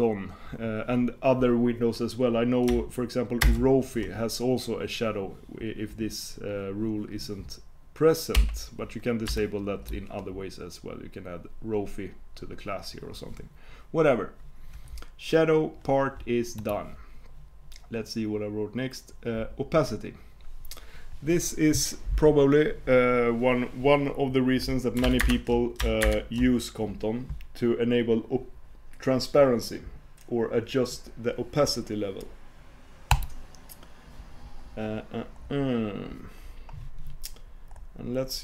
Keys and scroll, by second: 3.5 super+space, 25.3 alt+super+Return.